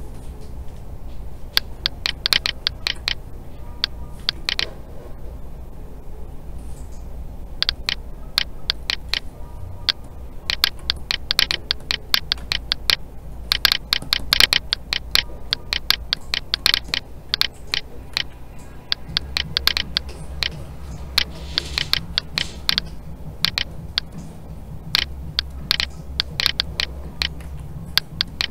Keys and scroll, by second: 18.1 alt+a, 27.4 alt+a.